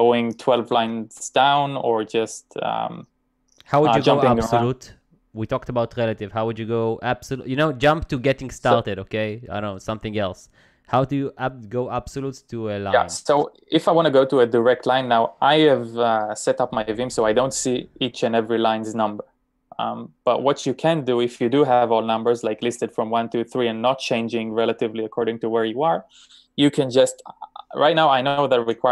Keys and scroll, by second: 11.6 typing, 14.1 typing, 22.4-24.2 typing, 28.6 typing.